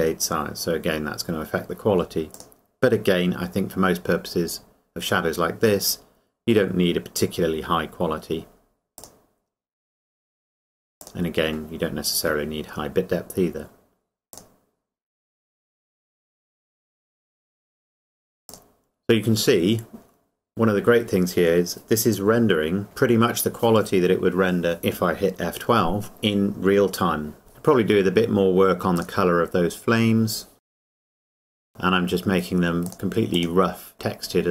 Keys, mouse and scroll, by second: 2.3 click, 9.0 click, 14.3 click, 16.5 scroll up 1, 27.5 middle click, 29.0 click, 30.7 middle click, 30.8 click, 30.9 scroll up 1, 31.0 click, 31.2 scroll down 1, 31.4 middle click, 31.5 click.